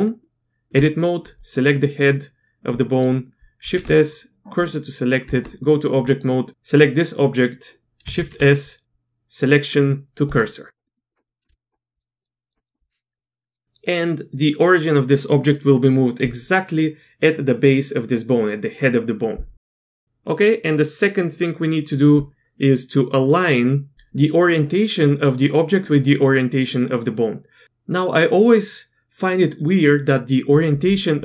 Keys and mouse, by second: 1.4 click, 2.7 drag, 3.6 shift+s, 5.2 Tab, 8.2 shift+s, 10.8 click, 11.4 q, 11.9-12.5 drag, 20.0 click, 20.2-21.2 drag.